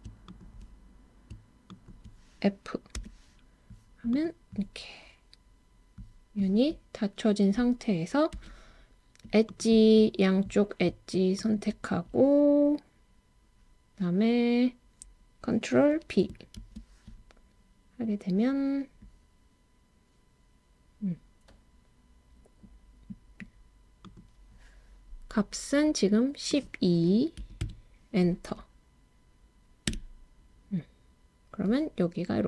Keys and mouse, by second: 0.3 shift+click, 1.8 shift+click, 4.1 click, 8.4 2, 11.4 shift+click, 16.6 super+b, 24.0 click, 26.6-29.9 drag.